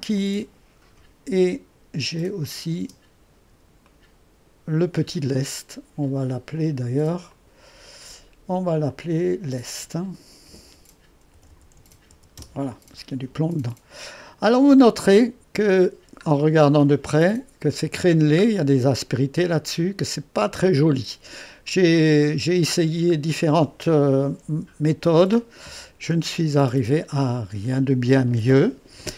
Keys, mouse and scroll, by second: 0.2-2.0 drag, 2.4-10.5 drag, 2.9 space, 10.5 F2, 11.1-12.6 typing, 14.2 click, 19.2-24.5 drag, 24.5 3.